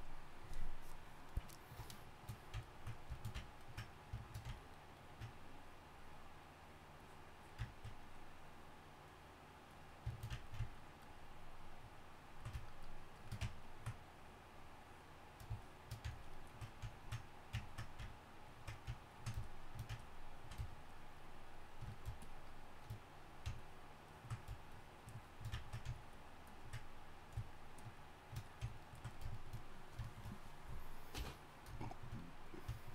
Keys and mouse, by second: 5.6-31.1 drag, 31.1 KP_1.